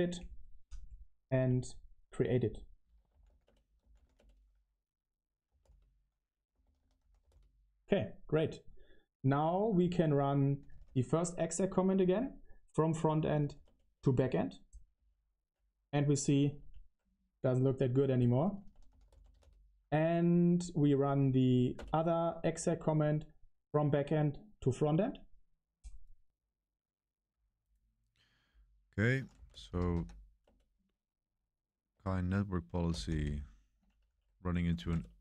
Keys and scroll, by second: 2.8-7.6 typing, 9.0-11.2 typing, 12.8-15.2 typing, 16.0 Up, 16.5 Up, 17.6 Page_Up, 17.6 Page_Down, 17.7 ctrl+c, 17.9-21.4 typing, 21.7 Return, 29.2-30.3 typing, 30.4 Return, 31.9 Escape, 32.8 typing, 34.0 Up, 34.7 Right.